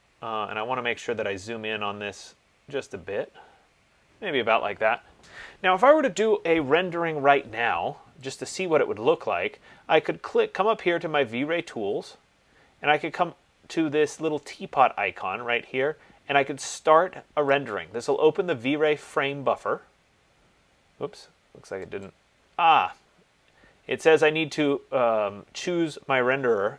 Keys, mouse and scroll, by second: 0.7 middle click, 2.9 middle click, 8.6 click, 18.0 click, 22.3 click.